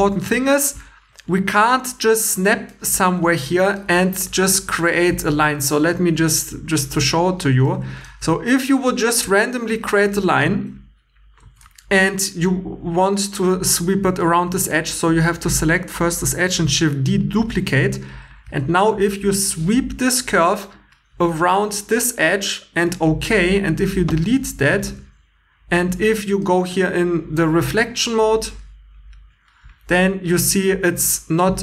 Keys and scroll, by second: 5.4 1, 11.4 2, 14.2 2, 16.6 shift+d, 17.8 2, 23.5-25.0 typing.